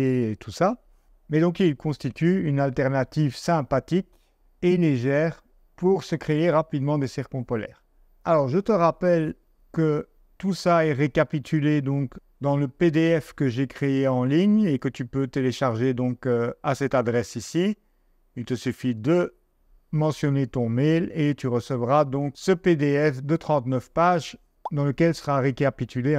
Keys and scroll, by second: 12.1 Down, 23.1 Down, 23.7 Down.